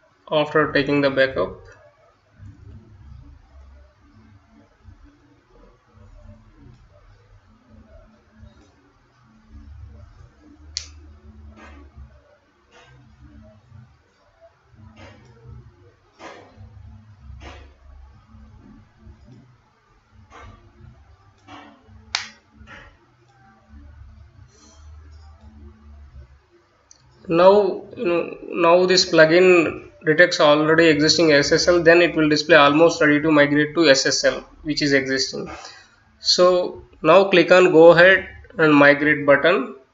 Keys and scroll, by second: 0.0-3.4 typing.